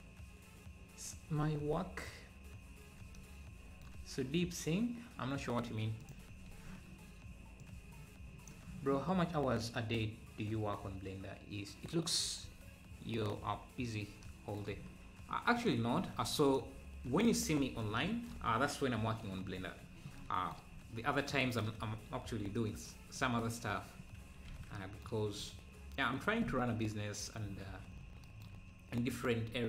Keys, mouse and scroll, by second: 6.0 click, 6.5 ctrl+s, 9.5 click, 15.6 click, 16.1 ctrl+s, 16.5 click, 16.7 `, 17.7 ctrl+s, 19.2-20.2 scroll up 6, 23.1 scroll down 3, 23.9-24.3 scroll up 2, 24.6 ctrl+s, 29.5-29.6 scroll up 3.